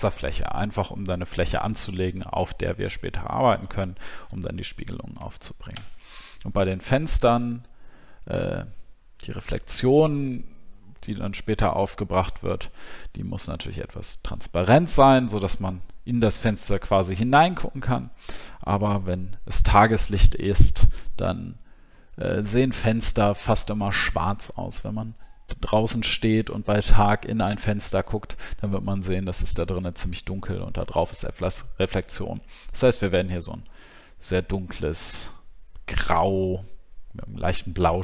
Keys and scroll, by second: 4.2 alt+scroll up 1.